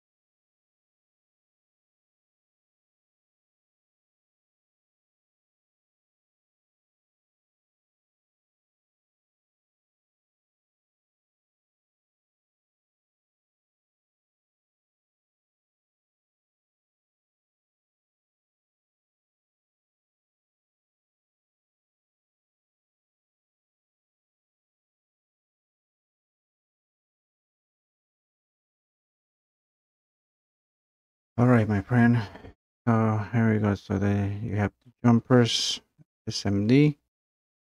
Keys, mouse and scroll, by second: 1.1 click, 4.6 click, 6.2 click, 8.1 click, 11.4 click, 16.0 click, 17.2 click, 18.7 click, 21.7-22.4 scroll down 3, 22.5-23.1 scroll, 23.4 scroll, 24.4 click, 26.4 scroll, 27.1 scroll, 27.9-28.8 scroll, 29.0 scroll, 32.4 scroll, 33.0 scroll, 36.3 scroll, 36.8-37.6 middle drag.